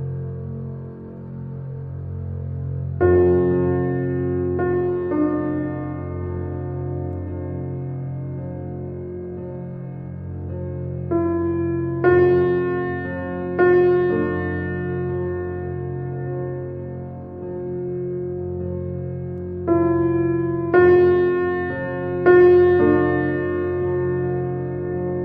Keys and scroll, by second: 6.8 8, 7.3 Return, 11.1 2, 11.3 0, 11.9 Return, 13.6 shift+space.